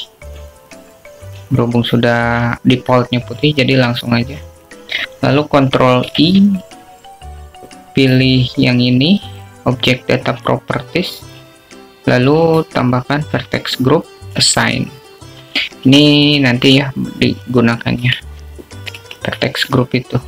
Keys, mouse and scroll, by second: 0.2 click, 1.7 click, 8.2 ctrl+i, 12.4 click, 14.6 click, 16.4 click, 20.1 Tab.